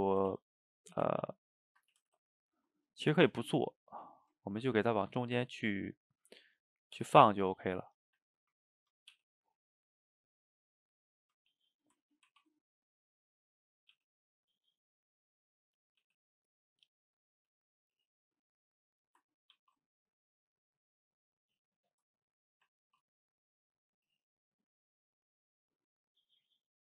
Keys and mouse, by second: 0.3 ctrl+z, 0.9 ctrl+shift+z, 1.1 ctrl+shift+z, 1.9 ctrl+z, 2.1 ctrl+z, 3.1 shift+click, 3.3-4.7 middle drag, 4.7 g, 5.8-6.8 middle drag, 6.8 click, 7.0 g, 8.1 shift+click, 8.3 middle click, 9.1 g, 10.1-12.3 middle drag, 12.3 ctrl+t, 13.9 g, 15.7 click, 16.1 g, 17.2 click, 17.4 g, 18.0-19.6 middle drag, 19.6 ctrl+t, 21.9 click, 22.2 middle click, 22.8 ctrl+t, 24.1-26.8 middle drag.